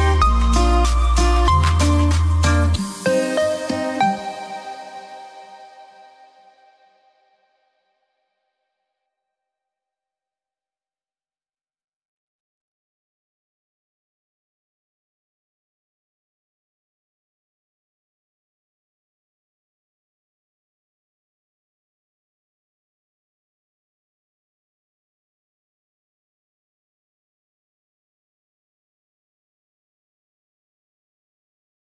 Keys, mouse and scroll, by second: 0.4 shift+Page_Up, 1.2-4.6 drag, 4.9 F3, 6.4-8.5 drag, 7.9 typing, 13.8 click, 13.8 typing, 14.2-15.5 ctrl+drag, 15.9 F2, 16.2-18.5 drag, 21.2 click, 21.2-22.1 typing, 21.8 alt+c, 22.9 click, 24.0 right click, 24.5-29.9 drag, 26.5 typing, 30.9 shift+right click.